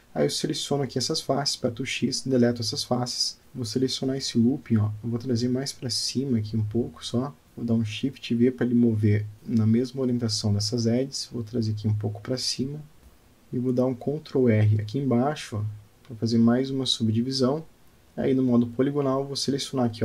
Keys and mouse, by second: 1.0 x, 5.0 middle click, 7.0 shift+v, 14.7 click, 16.2 click, 16.8 click.